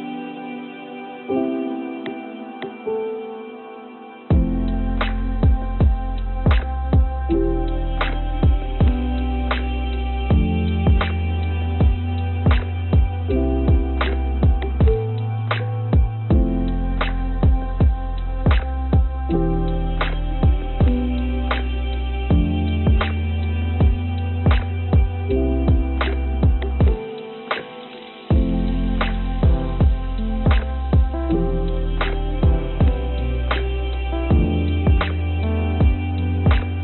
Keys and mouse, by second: 1.9 click, 2.5 click, 5.8 click, 6.6 click, 6.9 click, 7.4 Tab, 9.8-11.2 drag, 11.8 shift+click, 13.8 shift+click, 15.2 shift+click, 16.5 click, 18.8-19.9 drag, 24.8 click, 25.7-28.6 drag, 28.8 click, 36.3 click.